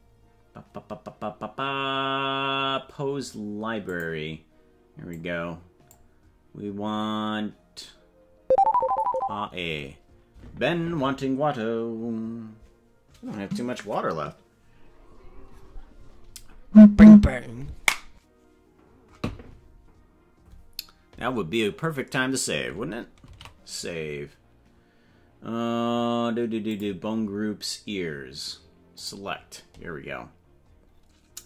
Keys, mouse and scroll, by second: 3.8 click, 5.1 click, 23.3 ctrl+s, 26.7 click, 29.0 click, 30.4-31.2 scroll down 8.